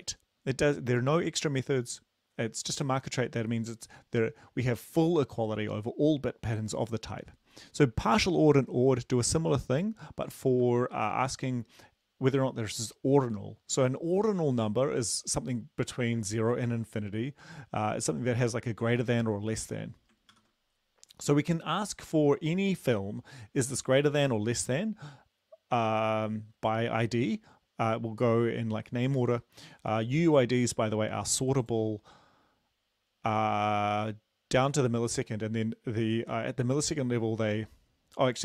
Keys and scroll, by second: 10.7 ctrl+c, 20.3 ctrl+v.